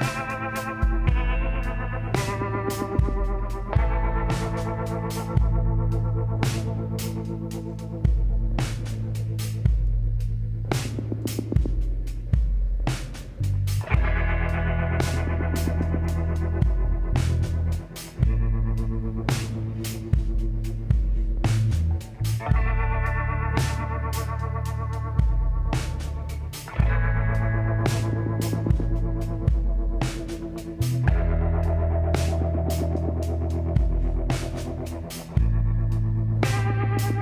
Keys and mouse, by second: 1.4 Tab, 2.3 KP_7, 3.6-5.4 drag, 7.7 middle click, 8.3-10.9 drag, 9.6 s, 12.2-14.1 drag, 15.6-17.1 middle drag, 17.1-19.6 drag, 19.6-21.2 middle drag, 24.8-28.7 drag, 27.8 Tab, 28.7 ctrl+a, 30.3 Tab, 31.6 click, 32.5 middle click, 33.6 KP_7, 36.3 s.